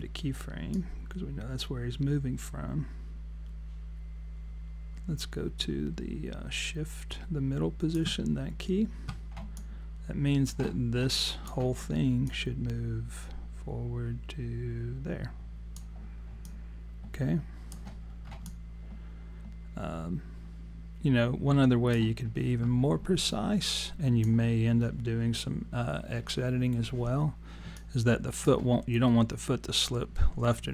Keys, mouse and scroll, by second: 0.8 click, 9.6 alt+click, 11.2 alt+click, 12.3 click, 16.4 alt+click, 18.1 scroll down 2, 18.5 alt+click, 23.3 alt+click, 27.8 alt+click.